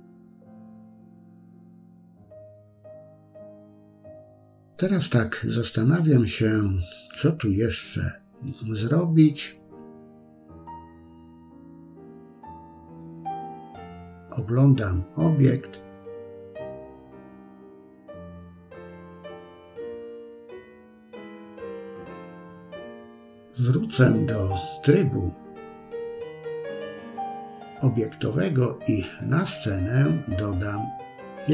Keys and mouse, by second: 0.2 shift+middle click, 2.6 middle click, 4.1 KP_1, 7.4 KP_3, 8.5 shift+middle click, 10.7-12.5 middle drag, 13.1 middle click, 14.3 KP_1, 16.0 shift+middle click, 17.3 shift+middle click, 19.6 Tab, 23.3-28.2 drag, 29.8 KP_3.